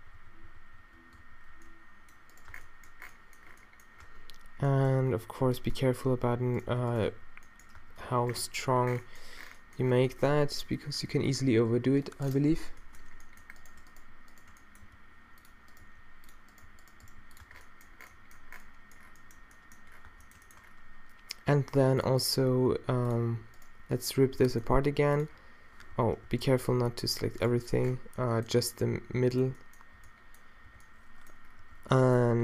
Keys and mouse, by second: 0.0-1.3 typing, 2.5 Tab, 4.1 Tab, 5.5 b, 7.1 q, 7.8 Tab, 8.1 Tab, 14.9 g, 15.9 g, 16.7 g, 17.1 g, 17.4 Tab, 17.7-18.9 middle drag, 18.9-19.4 drag, 20.1 Tab, 24.4 g, 26.0 z, 26.3 z, 26.9 g, 28.6 b, 30.0 b, 30.7 b, 31.7 z, 32.0 g.